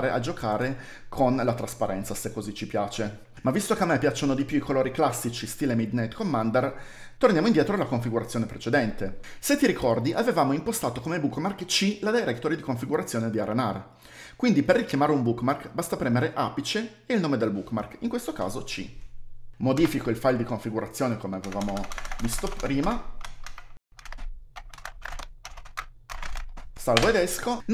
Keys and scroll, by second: 19.5-20.2 typing, 21.6-27.5 typing.